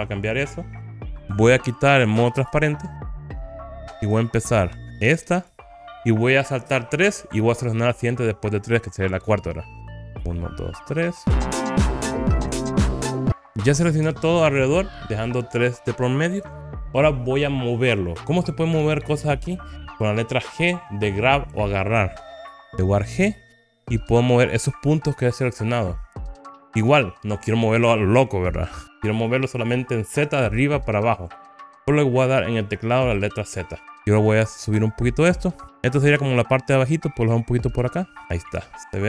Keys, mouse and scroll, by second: 2.4 alt+z, 3.4 click, 3.9-5.4 scroll up 2, 5.5 click, 11.2 shift+click, 12.8-14.0 middle drag, 13.3 scroll down 3, 23.2 g, 33.9 z, 38.3 click, 38.9 click.